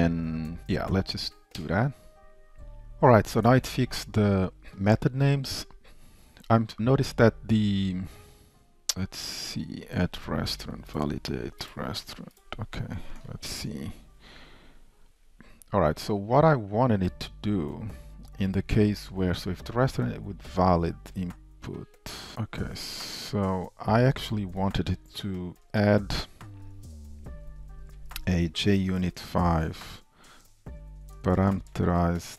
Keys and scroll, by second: 13.7 super+b.